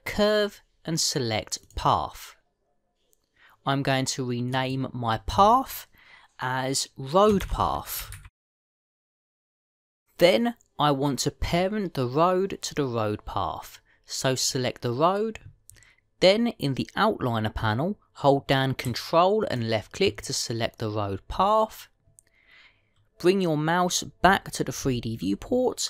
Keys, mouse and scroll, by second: 5.4 click, 8.3 click, 15.3 click, 20.4 ctrl+click.